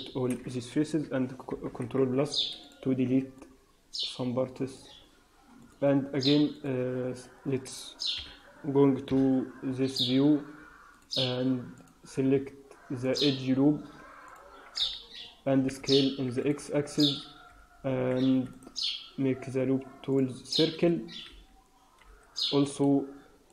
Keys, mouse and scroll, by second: 1.4 ctrl+KP_Add, 1.9 x, 3.3 middle click, 5.6 click, 6.4 middle click, 8.1 KP_3, 9.0 KP_1, 9.7 scroll up 4, 10.9 click, 11.6 click, 13.0 click, 15.5 s, 17.6 w, 18.2 Escape, 18.4 right click, 21.2 t, 21.9 t, 22.6 click, 23.4 click.